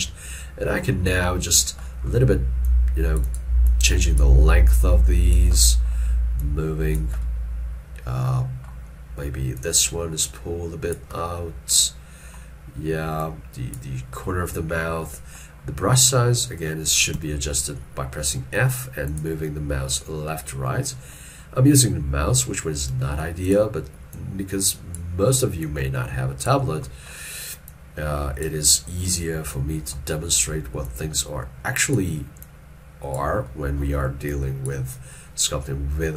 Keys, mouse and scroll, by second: 17.2 f, 19.7 middle click, 23.0 f, 26.9 middle click.